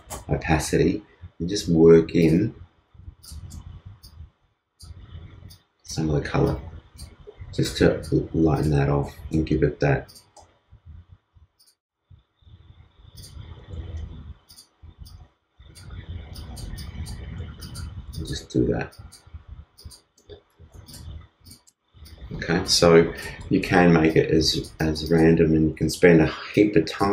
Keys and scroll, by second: 13.8 super+z.